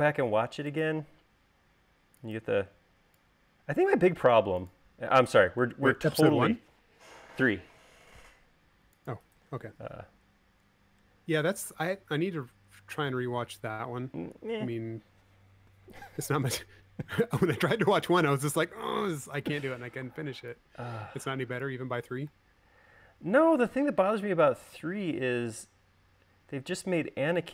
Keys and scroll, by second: 10.5 space, 20.3 v.